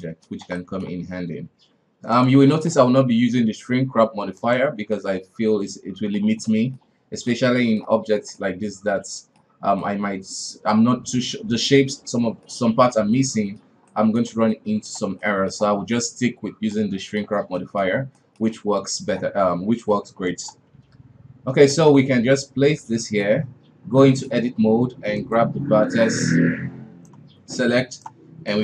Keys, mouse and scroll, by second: 0.0-1.5 middle drag, 1.5 g, 2.4-4.3 middle drag, 4.3 click, 4.9-8.0 middle drag, 8.0-8.4 scroll down 1, 8.4-9.4 middle drag, 9.4 scroll up 1, 9.8-11.7 middle drag, 11.7-12.0 scroll up 2, 12.0-19.0 middle drag, 19.0-19.8 scroll up 1, 19.8 s, 20.7 g, 21.9-22.8 middle drag, 22.8 Tab, 23.0-23.4 middle drag, 23.4 scroll up 1, 24.0-25.2 middle drag, 25.2 click, 26.3 right click, 27.5 right click, 28.5 right click.